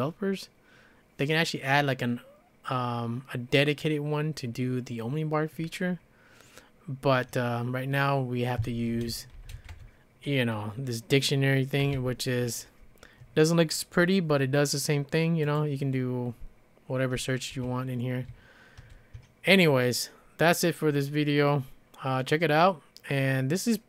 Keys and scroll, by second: 8.7 Escape, 8.9 Escape, 9.1-10.1 typing, 11.6-12.3 typing, 18.3 ctrl+d, 18.8 ctrl+c.